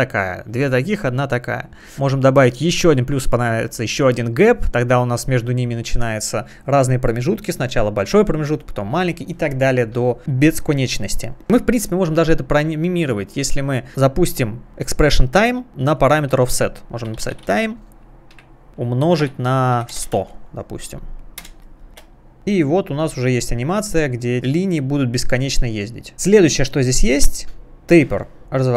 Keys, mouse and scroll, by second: 2.8 click, 10.4 click, 10.6 double click, 14.7 alt+click, 16.8-20.6 typing, 21.4 Return, 21.9 space, 26.6 right click, 28.4 click.